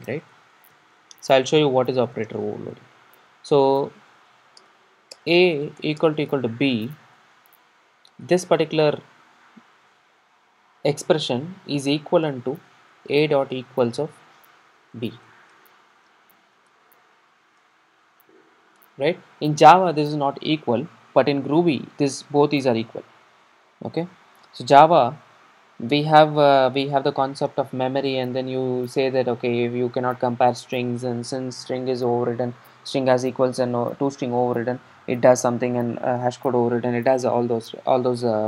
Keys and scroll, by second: 9.9 super+d.